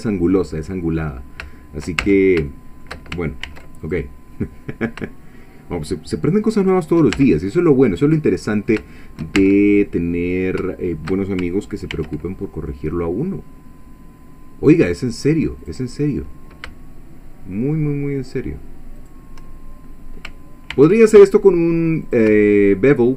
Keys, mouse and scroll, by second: 0.4 scroll down 2, 1.0-1.3 scroll up 2, 1.5 shift+middle click, 2.0 shift+Tab, 2.5 shift+middle click, 3.5 ctrl+r, 3.8 ctrl+click, 6.7 shift+click, 7.2 Tab, 7.6-7.9 shift+scroll down 1, 7.8 middle click, 8.0 middle click, 9.0 shift+middle click, 9.4 Tab, 9.9 shift+scroll up 1, 11.9 ctrl+r, 15.6 click, 19.0 shift+click, 20.7 ctrl+r, 22.1 click.